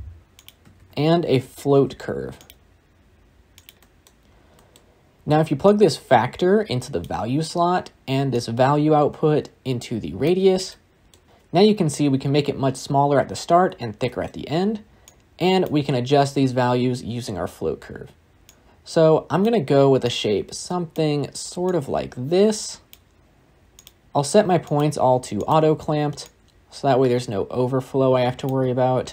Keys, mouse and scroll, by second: 2.4 shift+a, 6.9 click, 11.2-14.2 scroll up 1, 15.5-29.1 drag.